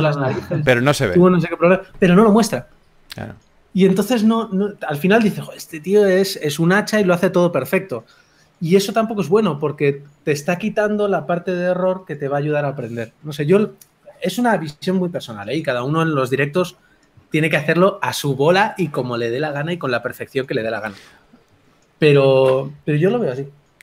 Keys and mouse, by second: 5.1-8.0 drag, 8.0 f, 8.8 click, 12.7 ctrl+z, 16.3-19.0 drag, 20.8 ctrl+z, 21.0 ctrl+z, 23.6 ctrl+z.